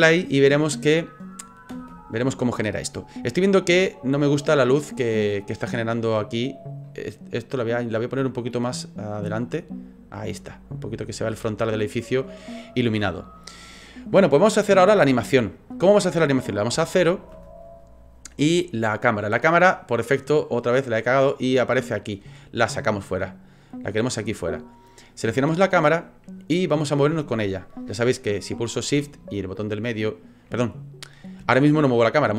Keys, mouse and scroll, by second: 1.7 space, 2.9 click, 6.2 middle click, 6.7 scroll down 1, 6.8 scroll up 1, 6.9 scroll down 3, 7.6 right click, 8.2 right click, 9.3 click, 13.7 click, 16.7 KP_0, 20.7 click, 22.1 click, 23.5 click, 24.8 click, 29.4 shift+middle click.